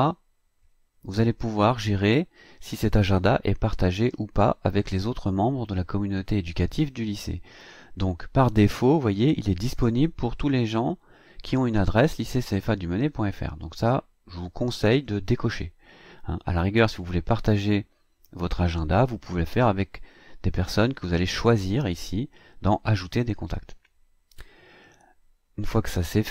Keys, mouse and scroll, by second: 0.0 click, 8.6-9.0 scroll down 2, 15.0 click, 18.8 scroll down 1, 25.3-26.0 scroll up 2, 26.0-26.3 scroll down 2.